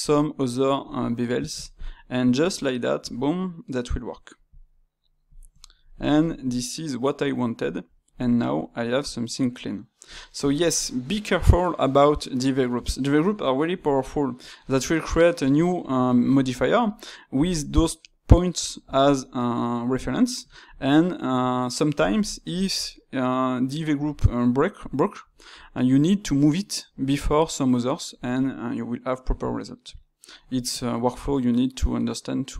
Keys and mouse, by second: 5.6-32.5 ctrl+middle drag.